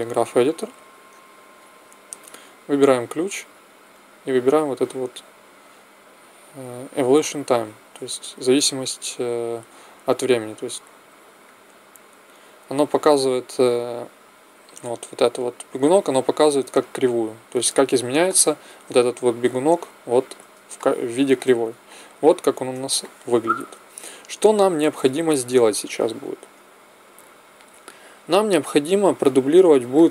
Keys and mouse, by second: 1.5-6.5 drag, 11.4-12.9 drag.